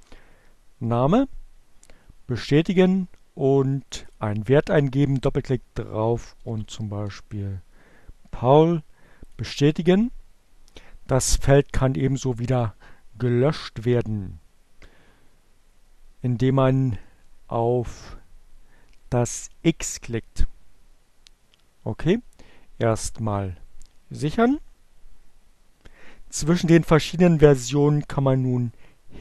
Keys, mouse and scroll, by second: 0.0-0.1 typing, 2.0 click, 2.8 click, 4.4-7.0 typing, 8.6 click, 22.4 click, 29.1 click.